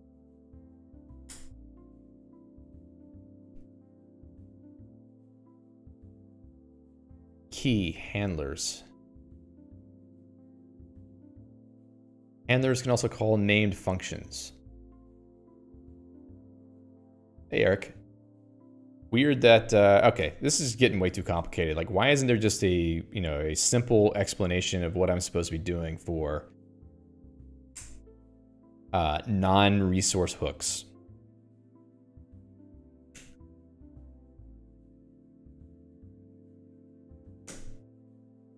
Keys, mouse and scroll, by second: 1.8 Return, 3.0 j, 3.3 l, 3.5 Return, 12.5 click, 13.4 click, 13.9 click, 20.7 q, 21.5 click, 21.6 q.